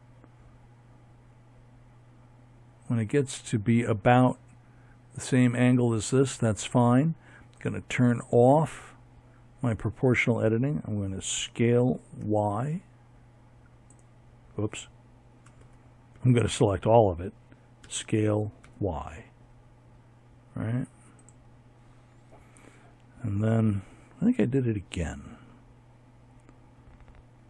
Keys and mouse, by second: 5.2-6.8 drag, 9.1 s, 13.3 a, 13.8 a, 15.5 s.